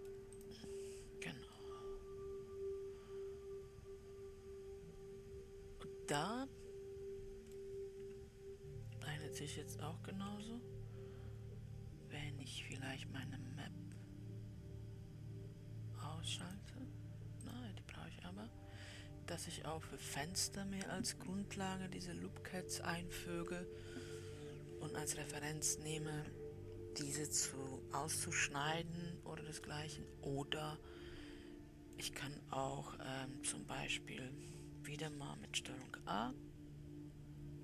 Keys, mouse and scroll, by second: 0.7 click, 2.1-5.3 middle drag, 8.6 w, 10.6 KP_7, 17.0 click, 19.8-22.3 scroll up 2, 30.7-32.3 middle drag, 32.3-33.0 scroll up 1, 33.3 w, 36.2 shift+a.